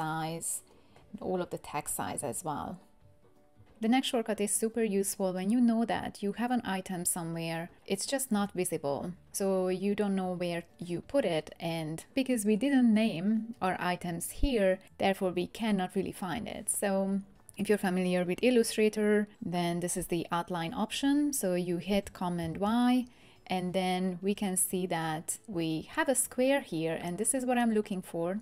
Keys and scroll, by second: 22.4 super+y.